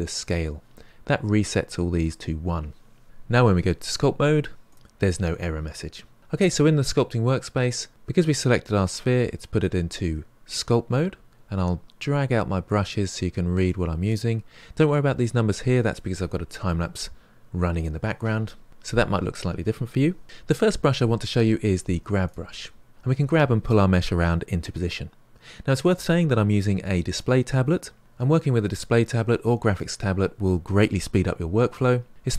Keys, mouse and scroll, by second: 4.7 click, 12.6-15.7 drag, 22.3 click.